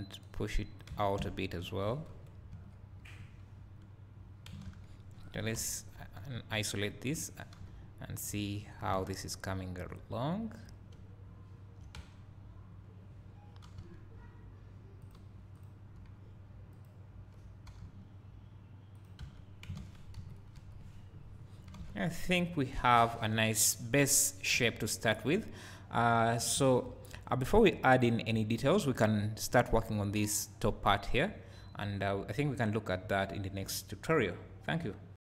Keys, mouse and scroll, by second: 0.2 click, 1.0 Tab, 1.2 `, 2.1 KP_1, 2.5 KP_3, 5.6 KP_Divide, 6.5 KP_1, 6.8-8.2 drag, 6.8 KP_3, 8.6-8.9 scroll up 1, 8.9 alt+a, 10.6 click, 10.9 `, 12.0 Tab, 13.7 g, 15.6 click, 17.7 g, 19.0 click, 19.2 Tab, 20.1 KP_1, 20.5 KP_3, 21.3 scroll down 2, 25.4 scroll up 1.